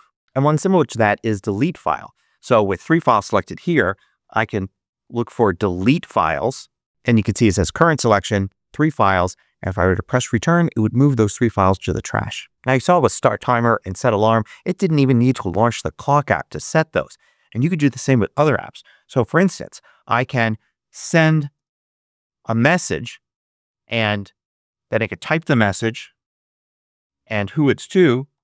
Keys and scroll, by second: 2.7 super+space, 3.5-5.5 typing, 6.2 Return, 19.4 super+space, 20.7-22.1 typing, 23.7 Return, 25.6-26.6 typing, 26.6 Tab, 27.6-28.4 typing.